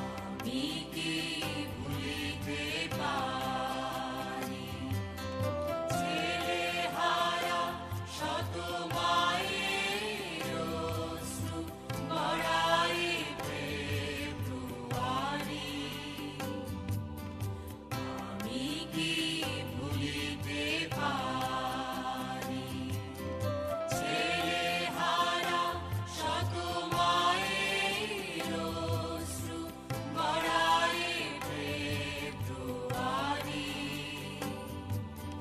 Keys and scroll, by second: 0.1 ctrl+KP_Subtract, 0.6 ctrl+space, 1.8 ctrl+alt+b, 2.0 space, 3.6 s, 4.5 space, 15.4 space, 17.0 space, 35.0 Down, 35.1 Down.